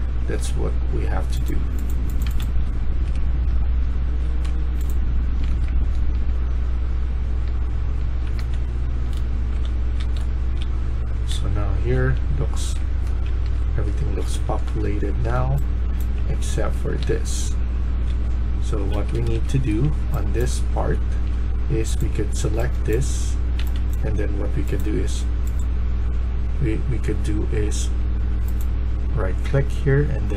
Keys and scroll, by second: 0.0-0.6 typing, 1.9-3.0 typing, 4.2-5.5 typing, 7.4-18.8 typing, 18.8 Escape, 19.1 Escape, 19.4 Escape, 20.3-24.4 typing.